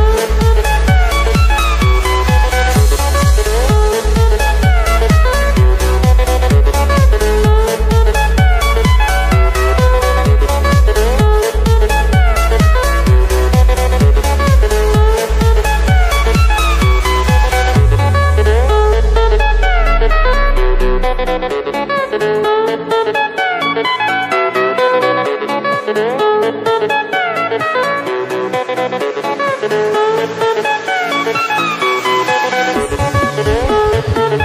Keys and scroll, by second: 2.3 ctrl+=, 2.9 space, 3.1 ctrl+=, 5.0 ctrl+z, 11.3 ctrl+z, 20.2 ctrl+-, 22.8 space, 24.5 space, 25.2 ctrl+=, 29.1 space, 29.9 ctrl+=, 30.6 space, 31.9 ctrl+z, 32.1 space, 33.4 space.